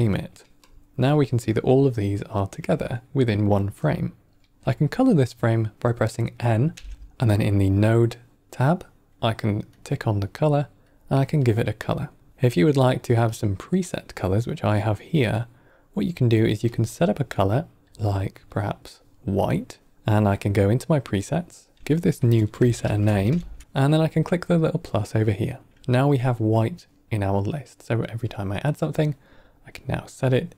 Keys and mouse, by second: 0.5 click, 1.0-2.2 drag, 6.6 n, 9.6 click, 10.8 click, 12.3 click, 13.2-13.7 drag, 14.8-16.5 drag, 16.6 click, 17.3 click, 17.8 click, 20.2-30.1 drag.